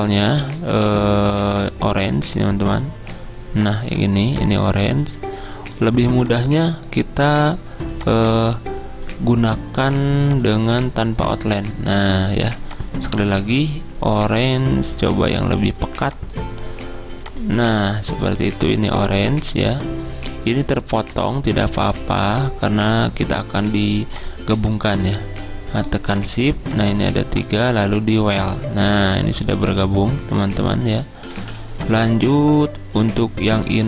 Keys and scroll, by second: 31.4 ctrl+z.